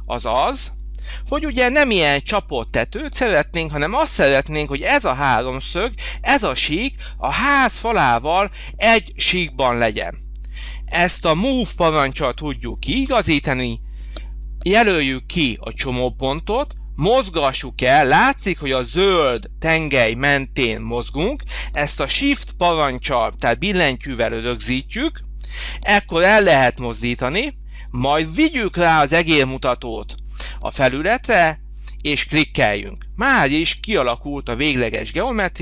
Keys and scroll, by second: 0.7 Delete, 12.9 m.